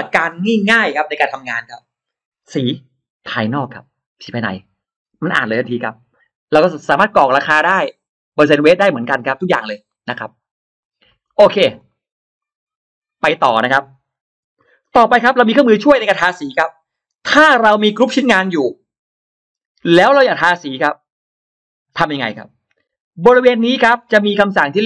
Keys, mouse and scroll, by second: 7.5-7.8 drag, 9.7 middle click, 9.9 scroll down 2, 10.6-10.9 drag, 11.1 middle click, 11.6 click, 11.6 space, 12.3-12.9 drag, 13.1 middle click, 13.3-14.0 scroll down 1, 14.2 Delete, 14.4 scroll up 2, 14.7 middle click, 15.5 scroll up 2, 15.9 middle click, 16.9 scroll up 2, 19.6-19.9 scroll down 2, 19.9 scroll up 2, 20.0-20.6 middle drag, 20.2 scroll down 2, 20.3-21.0 scroll up 4, 20.8 middle click, 24.8 ctrl+alt+middle click, 24.8 ctrl+alt+scroll up 2.